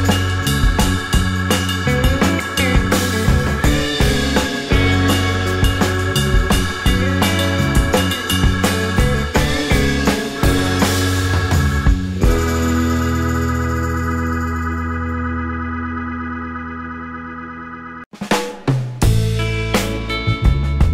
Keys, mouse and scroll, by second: 0.8-2.4 typing, 4.1 typing, 4.2 scroll down 1, 5.5 typing, 5.6-6.0 scroll down 1, 6.0 scroll up 1, 6.0 scroll down 1, 7.3 scroll up 1, 7.5 typing, 11.3 typing, 12.6-15.0 typing, 12.9-13.6 scroll up 1, 14.1 scroll down 1, 14.5 alt+middle click, 14.8 scroll up 2, 17.3 typing, 19.8 typing.